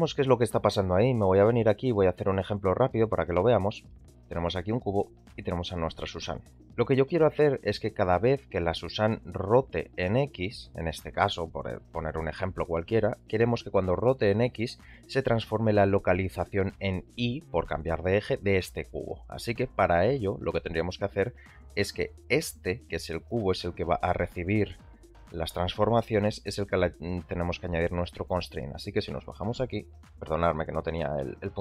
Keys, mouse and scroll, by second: 0.1-1.0 shift+middle drag, 1.8 shift+a, 3.9 shift+middle drag, 4.2 shift+click, 4.8 shift+a, 6.6 g, 7.1 middle click, 8.4 r, 14.8 click, 15.3 g, 20.1-20.5 middle drag, 22.8 click, 24.0-24.7 drag, 27.3-28.4 drag.